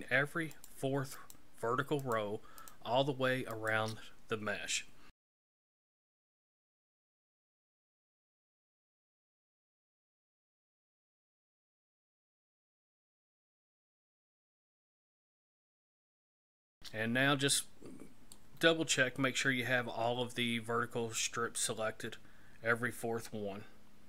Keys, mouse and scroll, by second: 0.5 shift+right click, 1.1 shift+right click, 2.0 shift+right click, 2.6 shift+right click, 3.5 shift+right click, 5.4 KP_3, 6.2 shift+right click, 6.6 shift+right click, 6.8 shift+right click, 6.9-7.4 shift+right click, 7.1 shift+right click, 7.2 shift+right click, 7.3 shift+right click, 7.5 shift+right click, 7.6 shift+right click, 7.8 shift+right click, 7.9 shift+right click, 8.1 shift+right click, 8.4 shift+right click, 8.5-9.0 shift+right click, 8.7 shift+right click, 8.8 shift+right click, 8.9 shift+right click, 9.2 shift+right click, 9.3 shift+right click, 9.4 shift+right click, 9.5 shift+right click, 9.7 shift+right click, 10.4 ctrl+KP_1, 11.1 shift+right click, 11.3-12.3 shift+right click, 11.4 shift+right click, 11.5 shift+right click, 11.6 shift+right click, 12.4 shift+right click, 12.7 shift+right click, 12.8 shift+right click, 12.9 shift+right click, 13.1 shift+right click, 13.2 shift+right click, 13.4 shift+right click, 13.5-14.0 shift+right click, 13.7 shift+right click, 13.8 shift+right click, 13.9 shift+right click, 14.2 shift+right click, 14.7 ctrl+KP_3, 15.2 shift+right click, 15.4 shift+right click, 15.5 shift+right click, 15.7 shift+right click, 15.8 shift+right click, 15.9 shift+right click, 16.0 shift+right click, 16.2 shift+right click, 16.3 shift+right click, 16.4 shift+right click, 16.6 shift+right click, 16.7 shift+right click, 17.6 middle click, 18.7-19.2 scroll down 2, 19.2 middle click.